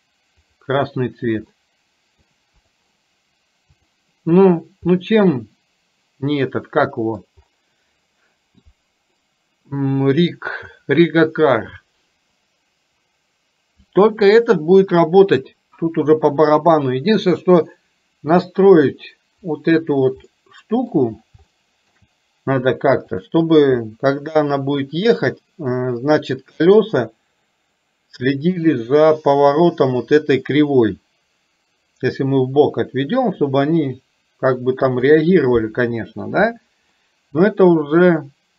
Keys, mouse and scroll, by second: 0.5 click, 1.6 middle click, 2.6 click, 3.9 click, 5.0-7.2 middle drag, 9.2-10.4 middle drag, 20.4-20.9 middle drag, 21.6-22.0 shift+middle drag, 23.2 click, 37.1-38.1 middle drag.